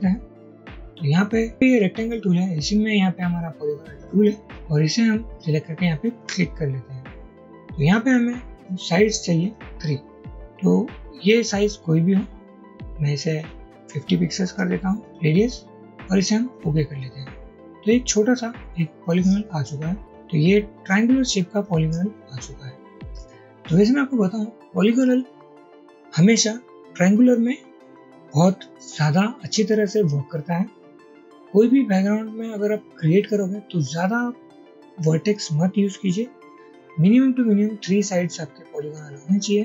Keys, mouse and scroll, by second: 14.1-15.0 typing, 21.0 shift+click, 21.6 shift+click, 23.7 double click.